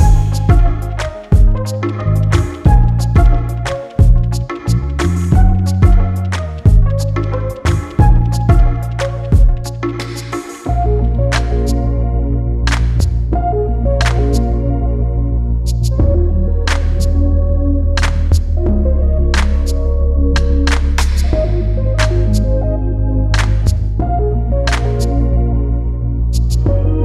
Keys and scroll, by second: 13.1 ctrl+alt+t, 24.4 Return.